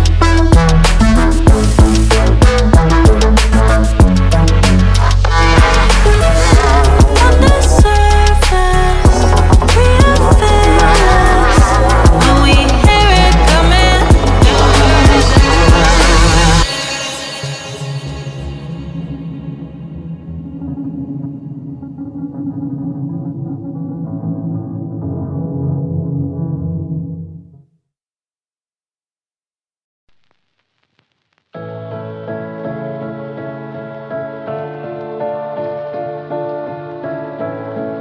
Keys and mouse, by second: 6.2 click, 12.2 click, 13.4 ctrl+z, 15.4-16.9 middle drag, 22.6-25.0 ctrl+z, 26.7 KP_1, 27.2 ctrl+r, 30.8 click, 35.5 click.